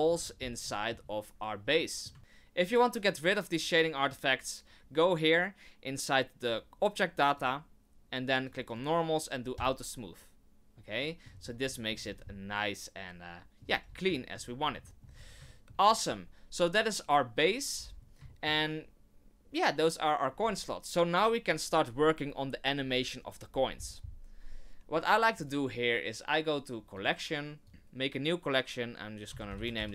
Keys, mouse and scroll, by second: 0.0-0.6 scroll down 13, 0.7 shift+middle click, 1.8 middle click, 2.2 click, 2.6 right click, 7.3 click, 8.4 click, 8.7 click, 9.6 click, 11.0 middle click, 11.3 scroll down 1, 11.4 scroll up 2, 11.7 shift+middle click, 11.8 shift+middle click, 12.1 scroll up 2, 12.3 middle click, 13.7-14.4 scroll down 8, 14.2 shift+middle click, 14.6-15.3 scroll up 6, 14.9 shift+middle click, 15.5 shift+middle click, 17.9 scroll down 4, 18.3 shift+middle click, 25.3 right click, 27.6 click.